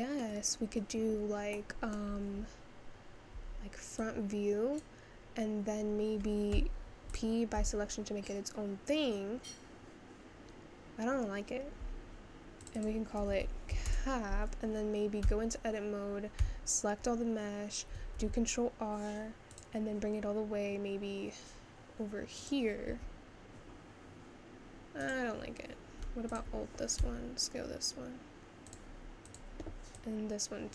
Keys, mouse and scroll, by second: 0.6-1.6 scroll down 1, 1.6-3.4 middle drag, 3.4 `, 4.8 click, 7.3 p, 7.6 Tab, 12.8-15.2 drag, 15.2 Tab, 16.4 a, 18.1 ctrl+r, 26.4 alt+click, 27.0 s, 29.4 click.